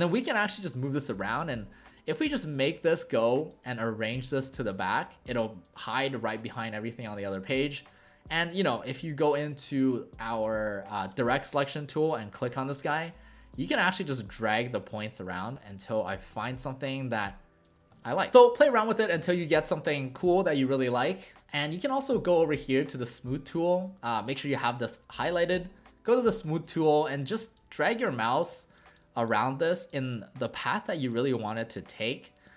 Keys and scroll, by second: 14.8 ctrl+z, 17.9 ctrl+z.